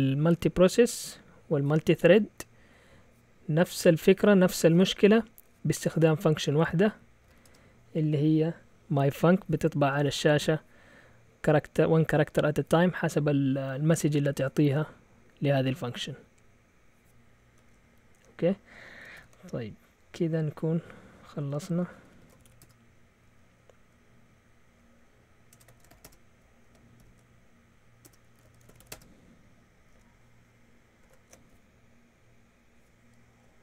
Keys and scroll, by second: 7.0-7.8 typing, 19.1 ctrl+l, 21.8-22.9 typing, 25.5 Escape, 25.5-29.3 typing.